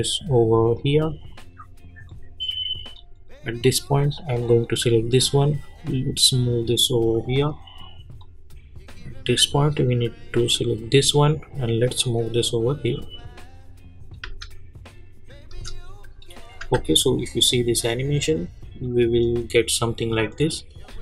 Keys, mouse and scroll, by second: 14.2 space, 16.2 click, 20.8 space.